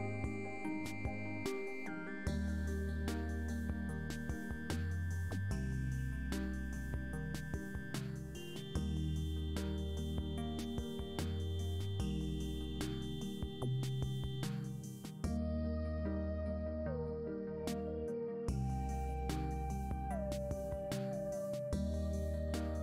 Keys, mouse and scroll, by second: 0.4 alt+shift+click, 1.1 alt+shift+click, 1.7 alt+shift+click, 2.6 alt+shift+click, 3.2 alt+shift+click, 4.8 click, 5.9 click, 6.7-7.8 drag, 8.5 click, 11.2 click, 12.0-13.1 middle drag, 14.4 alt+click, 15.9 alt+shift+click, 16.3 alt+shift+click, 16.9 alt+shift+click, 17.4 alt+shift+click, 18.2 alt+shift+click, 20.0 click, 21.1 click, 22.2-22.8 drag.